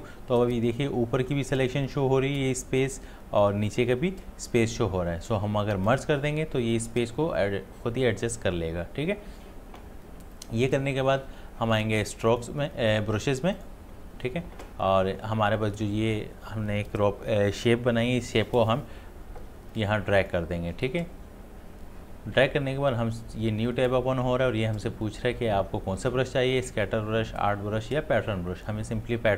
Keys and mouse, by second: 5.9 click, 10.3 click, 19.7-29.3 drag.